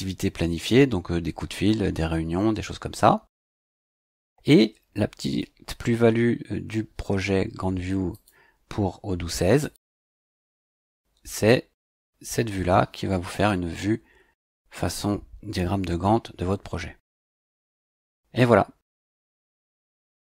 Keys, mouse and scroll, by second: 8.1 click, 9.6 click, 11.8 click.